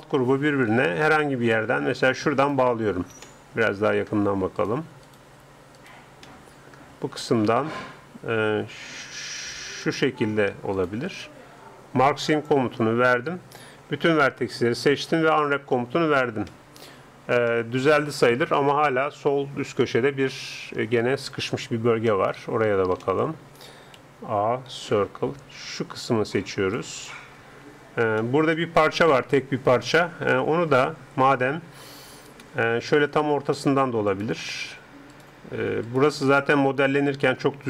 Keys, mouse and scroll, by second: 2.4-4.2 right drag, 3.4-6.3 middle drag, 4.6-7.6 right drag, 9.8-12.7 right drag, 12.3-14.0 drag, 13.8 a, 14.0 a, 14.8 u, 17.3-20.4 middle drag, 24.0 middle click, 24.0 a, 25.0 c, 28.2 click, 28.6-30.2 middle drag, 33.1-36.2 middle drag, 34.1-36.6 right drag, 36.3-37.6 middle drag.